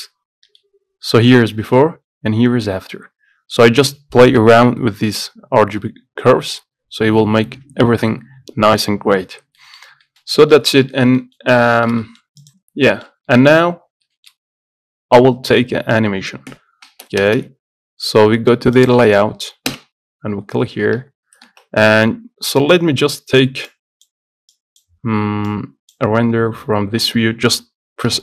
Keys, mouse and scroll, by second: 2.3 m, 9.5 scroll up 4, 9.7-10.9 middle drag, 11.1 shift+middle click, 11.6 scroll down 1, 11.9-12.9 shift+middle drag, 12.9 scroll down 1, 13.0 shift+middle click, 13.3 scroll up 2, 13.5 shift+middle click, 13.7-14.3 scroll down 1, 14.3-17.4 shift+middle drag, 17.4 KP_0, 19.0-20.0 drag, 21.3 z, 21.7 ctrl+s, 22.9-28.2 drag.